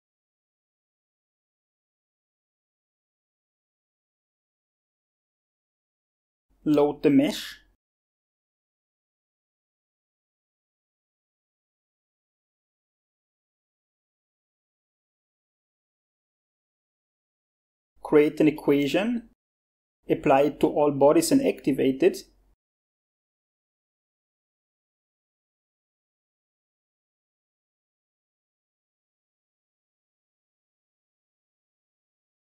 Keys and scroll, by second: 0.0-0.9 typing.